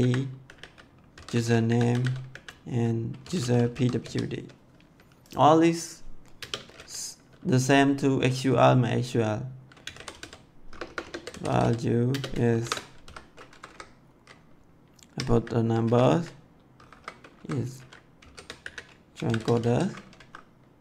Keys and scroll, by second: 0.0-4.4 typing, 6.2 space, 9.5-13.4 typing, 15.0 1, 15.2 ,, 16.6-20.0 typing, 20.1 Right.